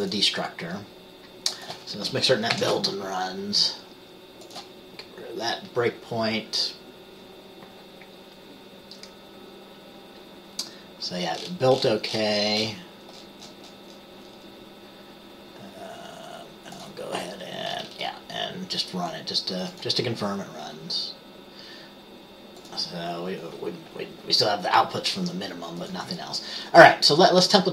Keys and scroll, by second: 2.7 ctrl+b.